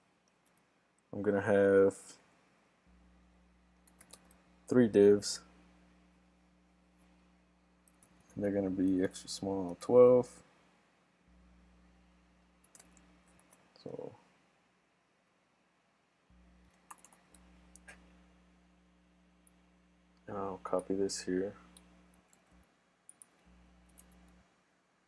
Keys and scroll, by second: 16.9 shift+super+d, 22.4 super+c.